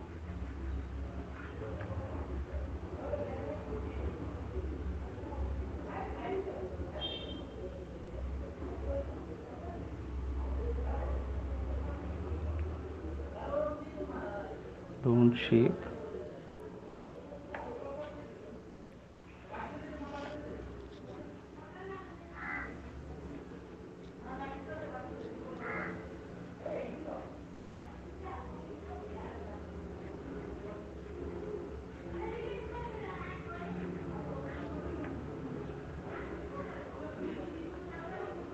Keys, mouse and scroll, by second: 1.1 click, 1.8 alt+click, 2.7 alt+click, 4.3 click, 5.6 click, 6.6 click, 9.0 click, 10.3 click, 11.5 click, 12.4 click, 13.6 click, 14.8 click, 15.6 right click, 15.6 click, 16.7 click, 17.8 right click, 17.8 alt+click, 19.4 alt+click, 19.6 click, 20.2 alt+click, 22.1 right click, 22.1 click, 22.2 click, 22.5 click, 22.7 alt+click, 23.1 click, 23.5 click, 23.9 click, 24.5 click, 24.9 click, 25.9 click, 26.6 click, 27.0 click, 27.4 click, 28.4 click, 29.0-32.7 drag, 33.8 click, 34.2 click, 35.2-36.0 alt+click, 36.0 click, 36.1 click, 36.7 click, 37.1 click, 37.9 alt+click, 38.4 click.